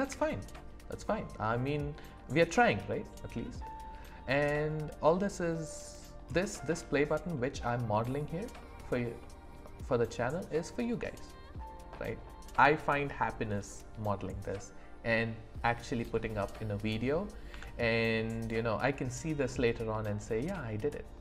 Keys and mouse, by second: 0.0 e, 5.8 click, 6.7 click, 6.7 right click, 8.0 click, 8.0 right click, 8.5 shift+click, 9.2 click, 9.2 right click, 17.5 Tab.